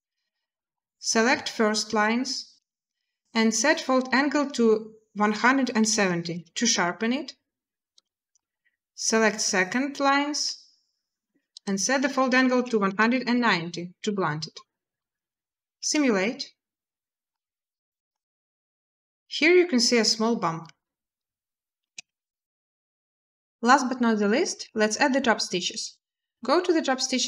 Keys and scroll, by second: 5.1-5.7 typing, 6.1 Return, 12.3-13.1 typing, 13.7 Return, 15.6 space, 18.8 typing, 21.6 space.